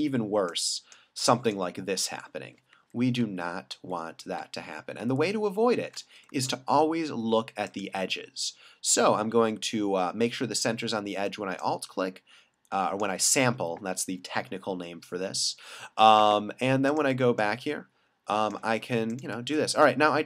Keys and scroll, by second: 2.7 alt+super+z, 3.8 alt+super+z, 4.4 alt+super+z, 5.0 alt+super+z.